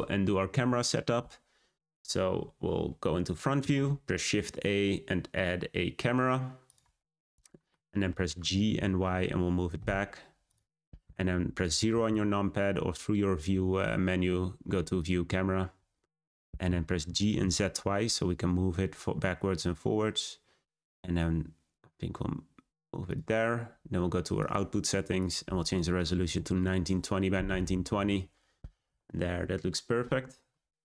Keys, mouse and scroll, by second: 0.9-1.9 scroll up 3, 1.9-3.3 scroll down 2, 3.5 shift+a, 7.2-7.7 middle drag, 7.7-8.0 scroll down 1, 8.0-8.4 middle drag, 8.4 g, 15.9-17.0 scroll down 2, 17.0 g, 24.3 click, 25.1-27.9 drag, 27.9-28.6 scroll up 3.